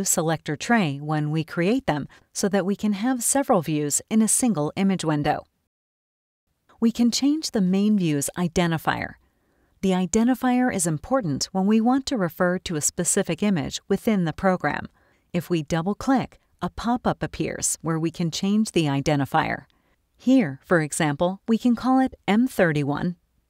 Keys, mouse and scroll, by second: 16.8 click, 20.6-22.1 typing, 23.0 Return.